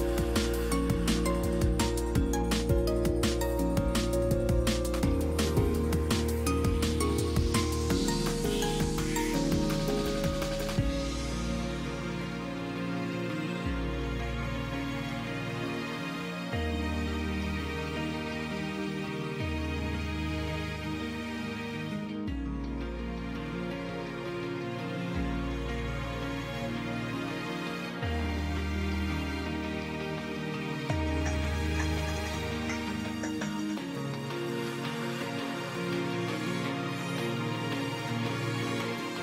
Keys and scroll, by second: 7.3 space, 10.1 space, 13.1 ctrl+space, 13.4 ctrl+space, 19.0 space, 22.8 space.